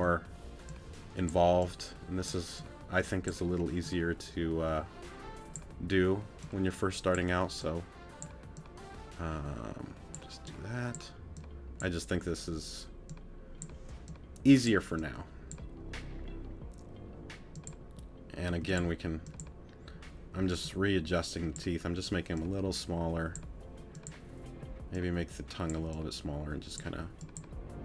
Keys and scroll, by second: 0.0 t, 18.5 t.